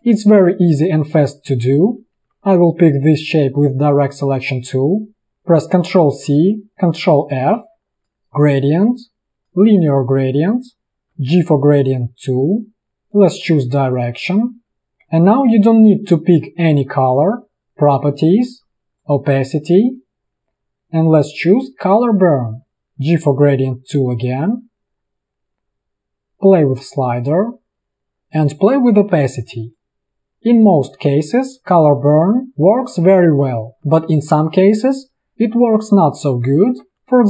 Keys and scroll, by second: 1.0 space, 2.4 a, 5.2 ctrl+c, 6.0 ctrl+c, 7.2 ctrl+f, 11.2 g, 14.9 v, 15.7 v, 22.7 g, 28.1 v, 36.8 a.